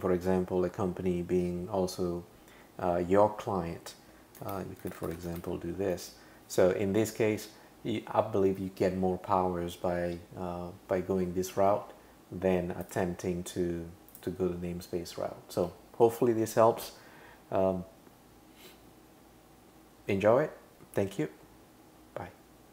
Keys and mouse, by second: 4.5-5.4 typing, 5.9 Return, 12.8 click.